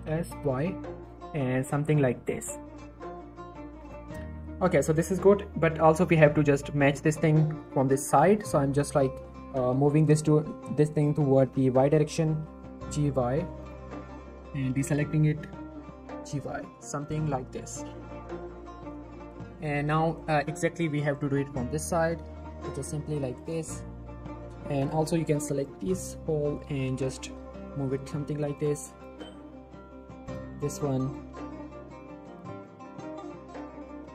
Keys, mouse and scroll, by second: 0.0-0.4 typing, 3.8 click, 4.0 z, 4.2 scroll down 1, 4.4-4.9 middle drag, 5.9 scroll up 1, 6.1 z, 6.7-7.2 drag, 8.4 shift+middle click, 8.5 shift+scroll up 1, 8.8 shift+middle click, 9.6 g, 9.8 y, 11.0 click, 11.2 scroll up 1, 11.6 ctrl+click, 12.6 g, 12.8 y, 13.6 click, 14.1 ctrl+click, 15.4 g, 15.6 y, 17.0 click, 17.2-17.7 scroll up 1, 17.9 click, 18.0 g, 18.2 y, 18.9 click, 19.1-19.4 scroll down 1, 19.5 shift+middle click, 19.9 click, 20.3 scroll down 1, 20.5 shift+middle click, 21.0 shift+click, 22.2 g, 22.4 y, 23.4 click, 23.6 shift+middle click, 23.7-24.1 shift+scroll up 2, 24.3 scroll down 1, 25.3-25.8 shift+click, 25.8 scroll up 2, 26.0-27.3 typing, 28.6 click, 29.4 typing, 30.2 click, 31.3 g, 31.4 y, 32.0 click, 32.5 click, 32.7 g, 33.2 right click, 33.4 click, 33.7 g, 33.8 y.